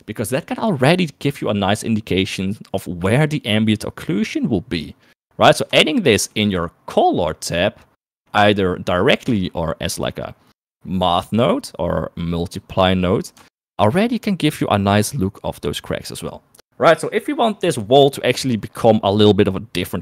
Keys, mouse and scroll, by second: 6.2 shift+middle click, 7.5 middle click, 8.0 middle click, 8.5 middle click, 9.2 middle click, 12.4 click, 14.0 ctrl+shift+click.